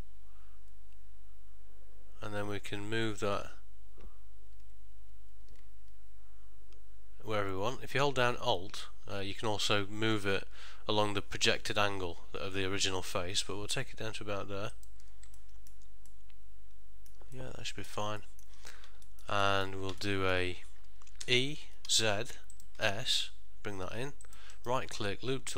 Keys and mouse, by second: 15.5 ctrl+middle click, 16.2 middle click, 17.5 ctrl+middle click, 18.3 middle click, 19.2 ctrl+middle click, 19.6 shift+middle click, 20.1 middle click, 21.3 e, 22.8 s, 24.6 right click.